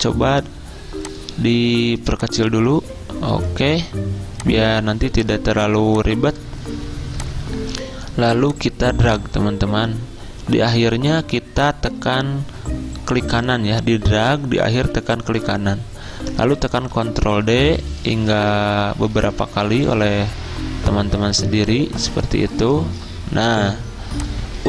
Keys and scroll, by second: 16.6 ctrl+d, 16.8 ctrl+d, 16.9 ctrl+d, 17.1 ctrl+d, 17.3 ctrl+d, 17.5 ctrl+d, 17.6 ctrl+d, 18.5 ctrl+d.